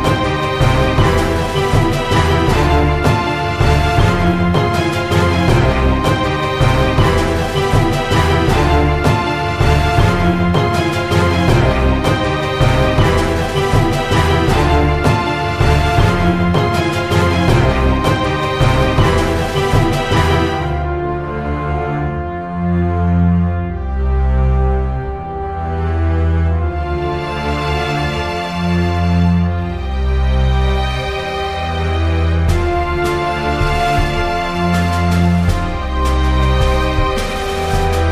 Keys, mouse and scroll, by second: 0.7 middle click, 1.2 click, 1.5 s, 2.7 click, 3.4 middle click, 3.6 Tab, 3.7 Tab, 4.2-5.5 middle drag, 6.8 right click, 7.0 shift+a, 8.2 r, 9.6 r, 11.2 Tab, 11.6 click, 12.8 KP_1, 13.8-15.4 drag, 15.7 click, 17.5 middle click, 17.7 Tab, 18.0 click, 18.8 s, 19.4 click, 20.0 middle click, 20.5 Tab, 22.5 click, 24.2 click, 25.5 middle click, 26.0 middle click, 26.8 click, 28.1 middle click, 28.1 KP_1, 30.3 middle click, 31.3 alt+s, 32.3 click, 32.6 alt+s, 33.2 middle click, 33.9 Tab, 34.2 middle click, 34.7 click, 35.8 alt+c, 36.2 Tab, 36.8 a, 37.2 middle click, 37.5 click.